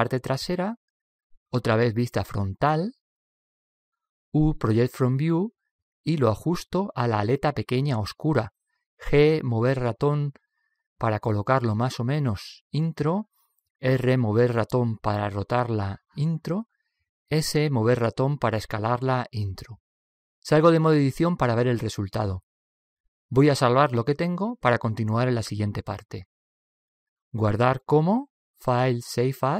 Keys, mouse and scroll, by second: 2.5 KP_1, 4.8 u, 9.4 g, 14.3 r, 18.3 s, 21.7 Tab, 21.9 Tab, 22.2-23.6 middle drag, 23.7-25.9 middle drag, 26.9-28.7 drag.